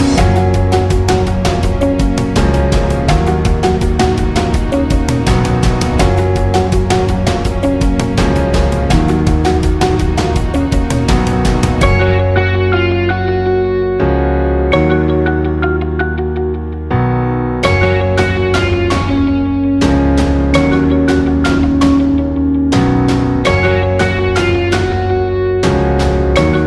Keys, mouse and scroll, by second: 0.3 click, 2.1-3.8 alt+shift+drag, 15.5-18.8 drag, 18.8 1, 23.4 Return, 25.3 click, 26.5 alt+scroll up 1.